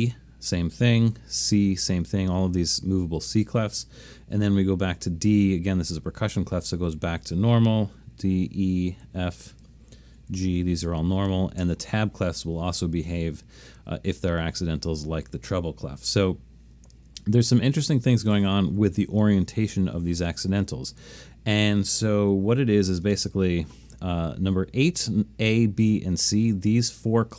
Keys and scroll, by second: 1.6 c, 4.4 d, 8.5 e, 9.0 f, 10.3 g, 11.6 h, 13.2 i, 18.7 8.